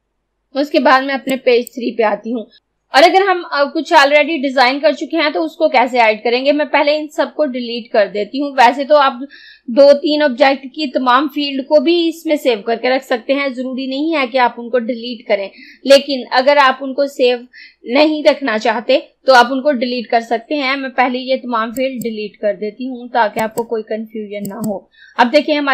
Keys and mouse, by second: 1.4 click, 21.8 click.